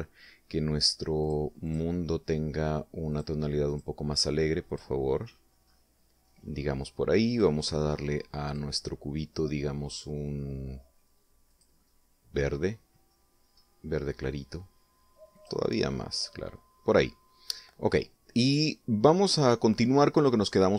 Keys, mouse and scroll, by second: 1.6 click, 2.0 click, 3.5 click, 4.1 click, 5.0 click, 5.6-6.3 scroll up 4, 6.7 scroll down 2, 7.7 right click, 8.8 click, 11.8 click, 12.8-13.3 scroll down 2, 13.9-14.2 scroll up 1, 14.6 scroll up 1, 15.7 click, 19.0-20.2 middle drag.